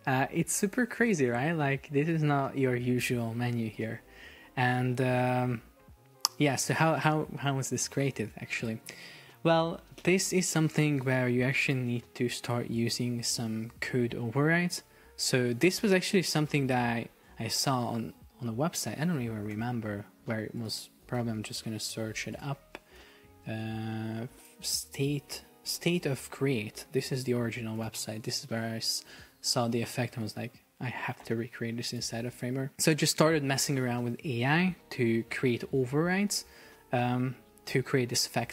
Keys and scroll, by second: 4.4 Escape, 19.5 alt+f.